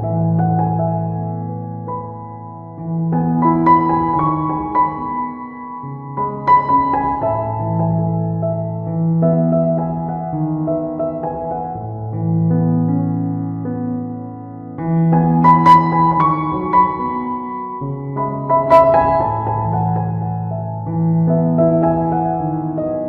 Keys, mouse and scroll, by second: 0.2 ctrl+middle click, 0.9 ctrl+right click, 1.4 right click, 2.0 f, 2.4 click, 4.9 middle click, 5.7 right click, 6.2 ctrl+right click, 7.1 right click, 7.5 click, 10.9 right click, 11.2 ctrl+right click, 11.6 click, 13.7 right click, 14.1 ctrl+right click, 14.6 click, 16.9 click, 18.2 click, 18.8 middle click, 19.3 shift+middle click, 19.5 middle click, 19.9 ctrl+right click, 20.3 right click, 20.6 ctrl+right click, 21.0 f, 21.3 click.